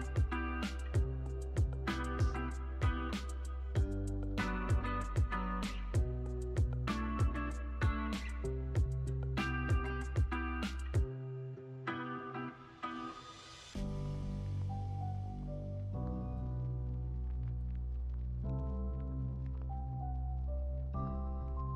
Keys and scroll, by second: 2.5 super+z, 4.7 super+z, 16.9 z, 17.6 x, 18.4 z.